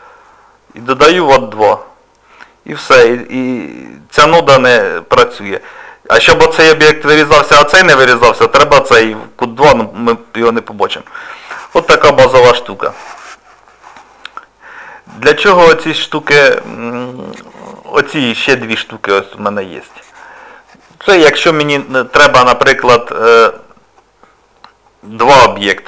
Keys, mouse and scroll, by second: 2.4 middle click, 8.5 click, 10.2 middle click, 11.3 shift+middle click, 16.2 click, 19.1 click, 22.9 middle click.